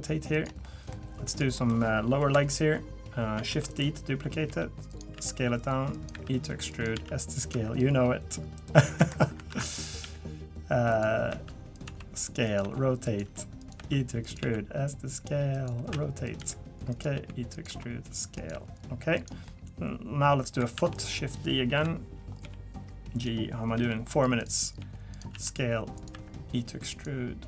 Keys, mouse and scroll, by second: 0.6 middle click, 1.3 click, 1.5 middle click, 2.2 KP_3, 3.5-7.5 typing, 8.6 right click, 9.5 ctrl+z, 10.0 g, 11.3 e, 11.8 s, 12.6 r, 13.2 g, 14.4 s, 15.9-18.5 typing, 19.4 middle click, 20.7 shift+d, 21.8 KP_3, 22.4 g, 23.7 g, 24.8 g, 25.3 s, 26.1 e.